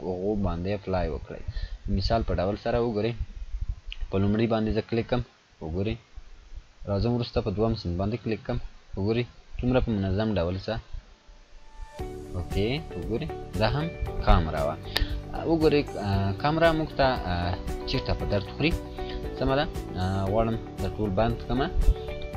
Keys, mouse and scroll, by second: 0.0 click, 0.1 scroll down 1, 2.1-2.7 click, 2.7 scroll down 1, 4.5 click, 7.3 click, 7.3 click, 10.3 click, 10.3 click, 13.6 click, 17.0-17.6 click, 17.5-18.3 scroll down 2, 18.8-19.3 scroll down 1, 19.3-19.7 scroll up 1, 21.1 click, 22.1 scroll up 1.